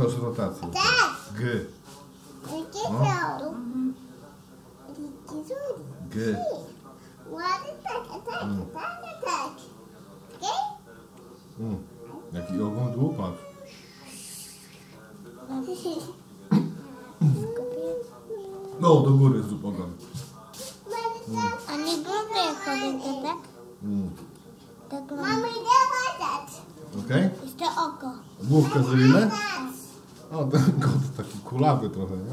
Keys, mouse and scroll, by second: 2.0 g, 11.0 g, 29.7-31.2 middle drag.